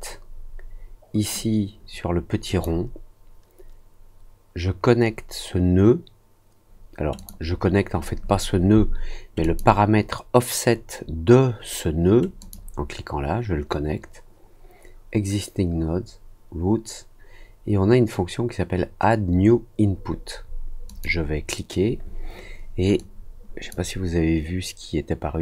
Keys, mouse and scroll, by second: 2.4 click, 7.1 click, 9.4 click, 12.3 click, 20.8 click, 22.9 click.